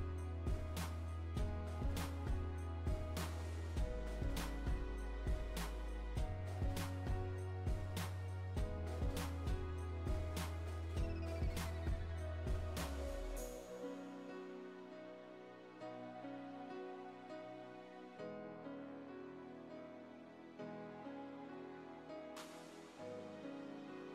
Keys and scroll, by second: 2.0 Right, 10.9 Right, 14.8 Down, 15.9 Left, 18.0 Right, 19.1 Right, 23.6 Right.